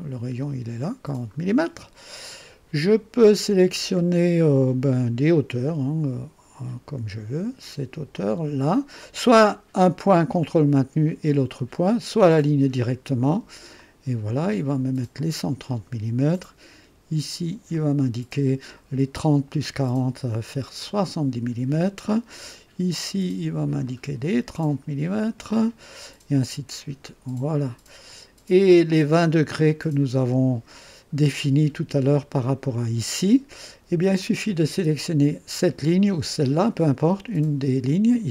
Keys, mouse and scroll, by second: 8.1 click, 13.7 click, 15.1-16.0 drag, 17.7 click, 20.8 click, 23.8 click, 25.1 click, 27.0-29.7 drag, 37.8 click.